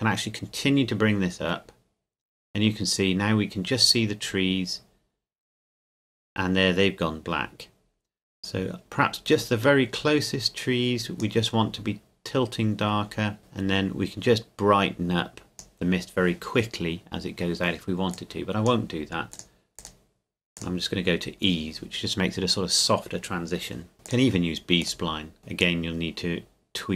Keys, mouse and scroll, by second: 13.4 click, 18.1 click, 24.0 click, 25.6 click.